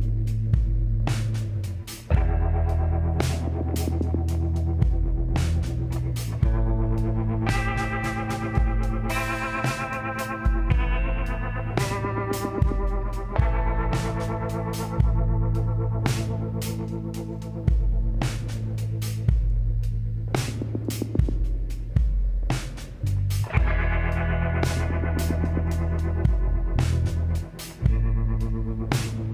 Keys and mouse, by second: 0.5-4.7 middle drag, 2.1 r, 4.7 s, 7.9 click, 8.5 KP_1, 9.3 s, 13.2-15.9 drag, 13.6 z, 14.5 b, 16.1 x, 18.0 z, 18.2 middle click, 20.0-21.8 drag, 21.4 s, 26.4-28.1 drag, 28.1 shift+d, 29.1 s.